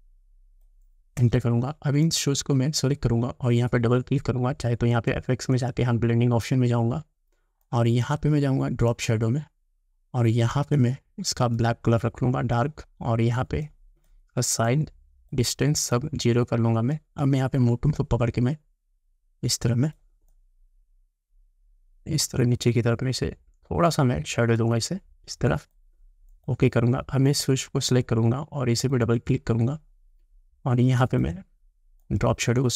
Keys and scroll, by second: 1.2 Return.